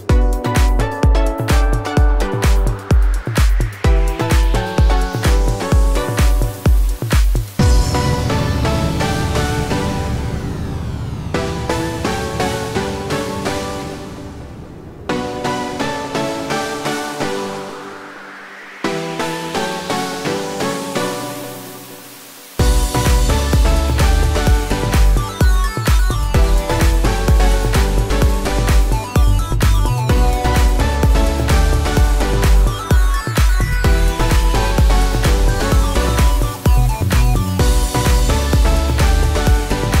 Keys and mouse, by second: 0.5-3.3 typing, 1.2-5.9 shift+middle drag, 4.7 2, 4.9-7.7 right drag, 6.1-7.1 middle drag, 7.7 shift+click, 7.8-27.2 shift+right drag, 13.0 alt+middle click, 15.2 shift+click, 15.2 shift+middle click, 18.8 middle click, 21.9 shift+click, 22.5 KP_Decimal, 27.2-32.7 alt+drag, 31.1 right click, 32.7-40.0 shift+right drag, 33.1-35.5 alt+middle drag, 36.0 2, 36.9 e.